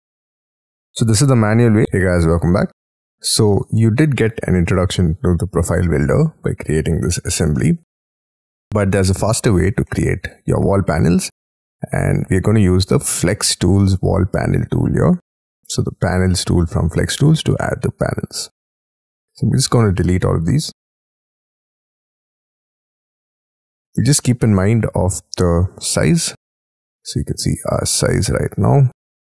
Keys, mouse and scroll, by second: 0.0-1.6 scroll down 33, 1.7 middle click, 2.0 scroll down 13, 2.7 middle click, 4.0 middle click, 4.6 scroll down 1, 6.5 scroll down 5, 6.8-7.3 scroll up 13, 7.5 middle click, 7.9-8.7 scroll down 14, 8.8-9.3 scroll up 7, 10.0 scroll down 1, 11.0 middle click, 12.0 scroll down 5, 20.8 Delete, 22.1-22.6 scroll up 12, 22.8 scroll down 7, 23.6-24.2 scroll up 21, 24.2 middle click, 24.7 t, 26.5-26.9 scroll up 10, 27.7 scroll down 1, 27.9-28.6 scroll down 1.